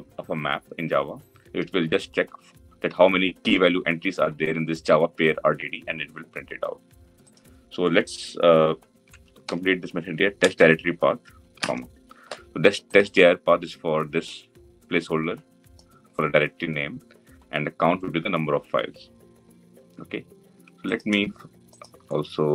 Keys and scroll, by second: 10.1 Return, 11.4 Return.